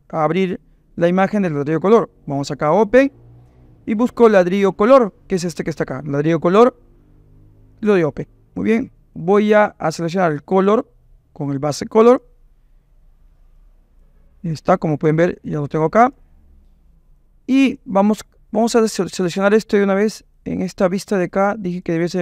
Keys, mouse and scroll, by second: 2.7-5.7 drag, 9.2 click, 10.8-12.2 drag, 13.6 click, 14.6 click, 15.6 click, 17.1 click, 20.3 click, 21.8 click.